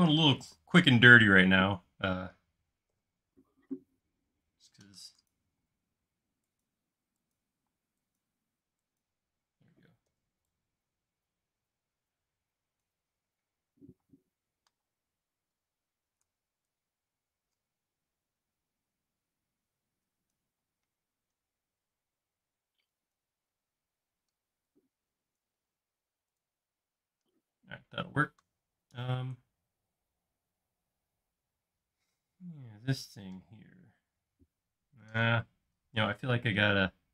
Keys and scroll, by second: 0.4 space, 3.0 f, 5.0 Escape, 5.6 space, 10.2 f, 14.1 space, 14.9 m, 16.1 Escape, 18.3 Up, 20.0 Escape, 20.6 typing, 22.4 typing, 24.0 typing, 25.8 space.